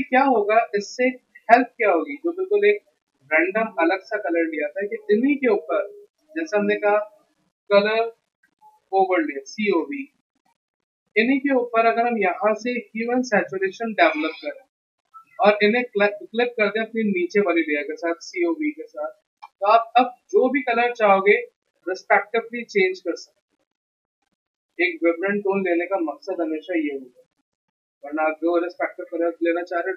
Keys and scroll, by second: 7.7-9.1 typing, 9.8 Return.